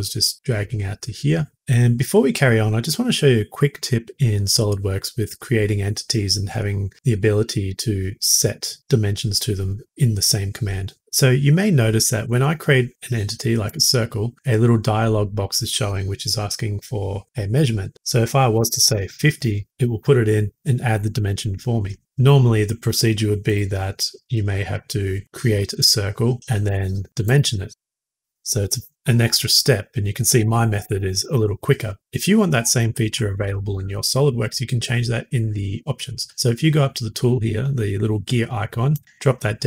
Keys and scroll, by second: 18.5-18.8 typing, 22.0 Escape, 26.6 s, 28.2 typing, 31.9 Escape.